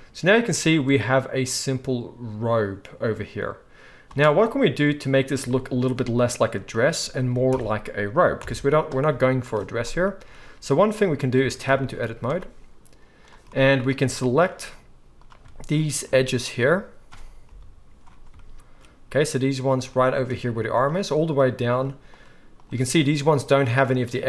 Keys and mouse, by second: 4.1 space, 5.5 shift+drag, 5.5 shift+right drag, 7.5 shift+Left, 8.4 KP_1, 10.4 z, 11.4 Tab, 12.0 z, 12.3-14.0 drag, 12.3-15.2 middle drag, 12.3-14.0 right drag, 15.2-18.3 shift+right drag, 17.4 KP_5, 18.3-20.2 shift+middle drag, 19.9 shift+right click, 20.7 shift+middle click, 20.8 shift+right click, 21.7 shift+middle click, 22.1 shift+right click, 22.5 shift+middle click, 22.6-24.2 shift+right drag.